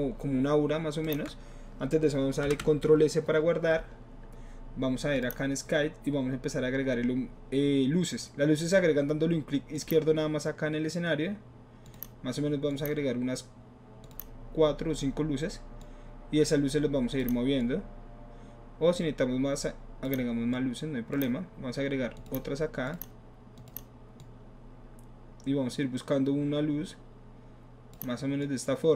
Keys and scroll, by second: 2.4 ctrl+alt+s.